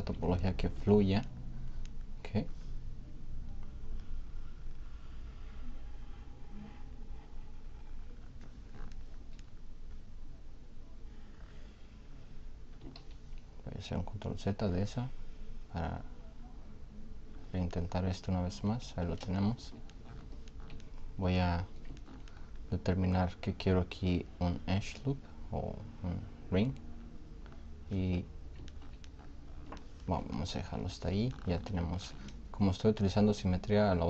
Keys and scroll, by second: 13.0 ctrl+z.